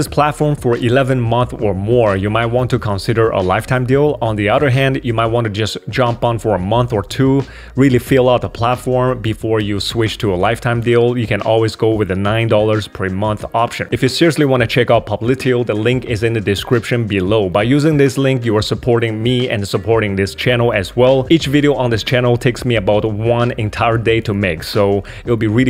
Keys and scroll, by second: 2.5 super+3, 4.7 super+2, 10.5 super+3, 10.9 super+2.